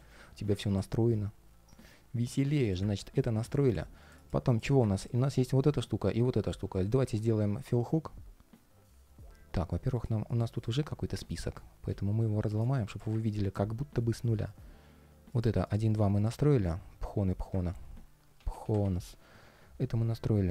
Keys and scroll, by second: 11.0 shift+super+g, 12.2 shift+super+g, 17.3 super+r.